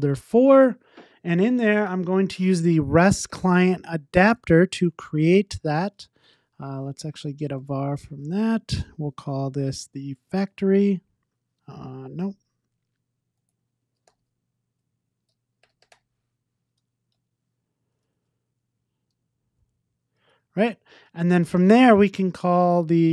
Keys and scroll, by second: 4.3 Tab, 7.9 Return, 17.3 Return, 18.1 super+z.